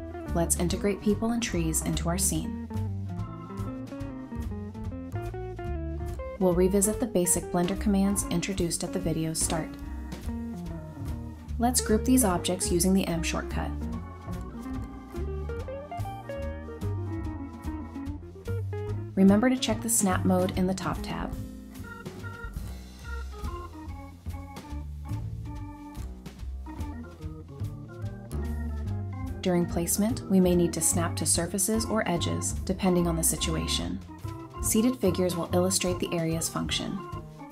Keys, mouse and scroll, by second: 0.1 scroll down 1, 0.4 shift+click, 0.7 shift+scroll up 1, 1.6 shift+click, 3.9 shift+click, 5.5 ctrl+c, 7.9 ctrl+v, 9.9 typing, 10.7 scroll down 1, 10.9 middle click, 11.2 scroll up 1, 11.4 scroll, 11.6-12.5 typing, 15.1 middle click, 15.9-16.4 scroll up 1, 17.1 typing, 20.4 scroll up 1, 20.6-24.0 typing, 22.8 scroll up 1, 23.9 scroll down 1, 25.1-25.9 typing, 26.1-26.4 scroll down 1, 26.4 middle click, 27.3 g, 28.4 scroll down 1, 28.5 middle click, 28.7-29.0 scroll up 1, 29.0 typing, 30.2-33.1 typing, 31.0 middle click, 31.6-32.0 scroll up 1, 33.3 scroll down 1, 33.6 middle click, 33.9 shift+middle click, 34.4 middle click, 34.6 middle click, 34.6 scroll up 1, 36.0-36.4 scroll down 1, 36.4-37.5 typing.